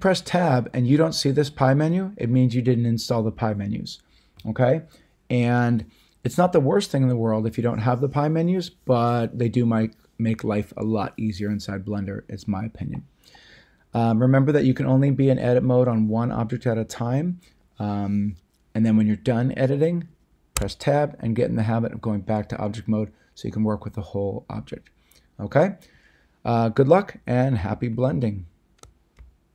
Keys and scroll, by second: 20.5 Tab.